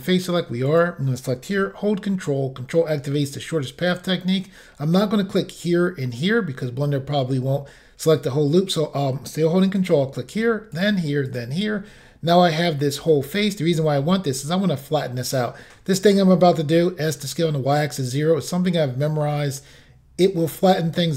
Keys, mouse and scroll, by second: 0.7 click, 9.8 ctrl+click, 10.8 ctrl+click, 11.3 ctrl+click, 11.4 ctrl+double click, 12.6 middle click.